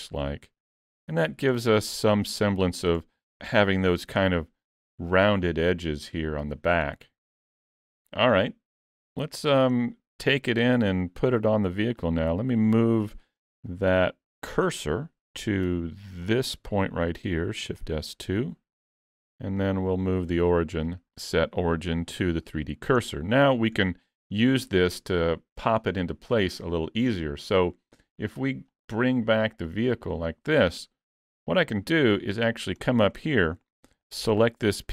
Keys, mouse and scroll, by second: 1.1 alt+a, 1.2-2.3 scroll down 2, 1.6 middle click, 3.9-6.9 scroll up 1, 6.9 middle click, 6.9 scroll up 2, 10.3-11.4 scroll up 4, 10.6 middle click, 11.7 scroll up 1, 12.0 click, 13.4 Tab, 13.7 middle click, 15.2 2, 16.3 alt+click, 17.7 shift+s, 18.8 alt+a, 19.0 Tab, 19.3-19.9 scroll down 4, 19.7 middle click, 20.8 click, 23.0-23.5 scroll down 5, 23.5 middle click, 28.8 click, 29.3 click, 30.0 click, 31.6 shift+middle click, 32.2-32.5 scroll up 3, 32.5 shift+middle click, 32.8 middle click, 33.2 shift+middle click, 34.1 click.